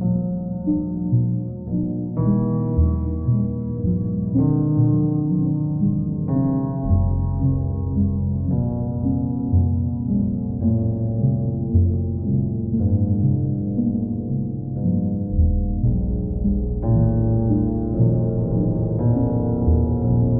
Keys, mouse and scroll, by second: 0.1 ctrl+click, 0.5 ctrl+click, 3.0 ctrl+click, 5.3 alt+click, 7.9 click, 10.5 click, 11.6 click, 11.8 ctrl+click, 13.0 ctrl+click, 13.4 ctrl+click, 16.5 click, 17.6 alt+click, 18.3 ctrl+click, 19.9 ctrl+click.